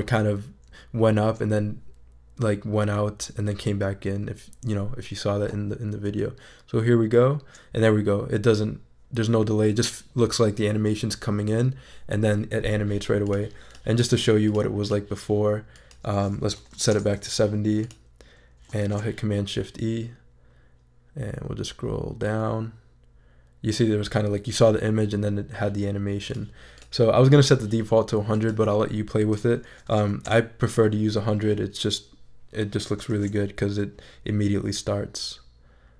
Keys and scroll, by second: 16.3-17.2 typing, 18.8 shift+super+e, 29.5-30.4 typing, 33.1 shift+super+e.